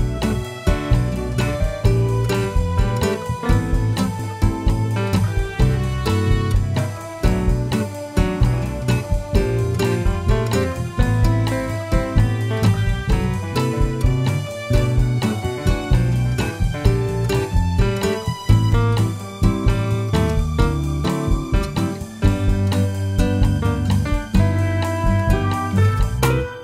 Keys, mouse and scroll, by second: 6.9 click, 7.5 click, 8.0 click, 9.5 click, 20.6-26.6 drag, 21.7 KP_0, 21.9 KP_Enter.